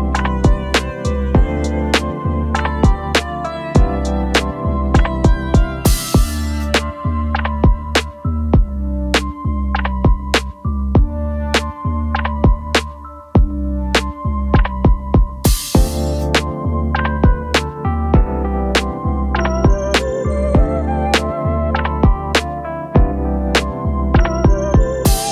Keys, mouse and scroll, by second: 2.0-7.4 typing, 11.4 alt+click, 14.9 alt+click, 16.1 3, 17.0 ., 17.0 space, 21.6-24.7 typing.